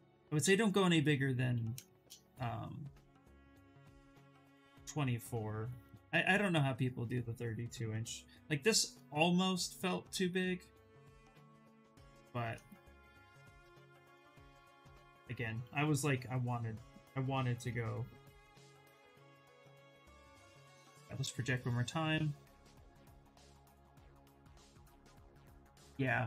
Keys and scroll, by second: 19.1 ctrl+d.